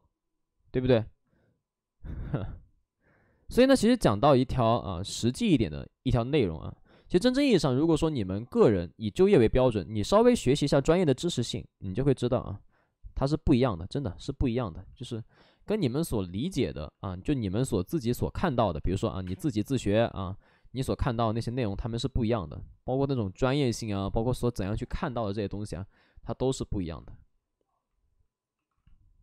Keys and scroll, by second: 3.2 ctrl+z, 18.7 space, 19.0 3, 19.1 space, 24.9 space, 27.9 ctrl+d.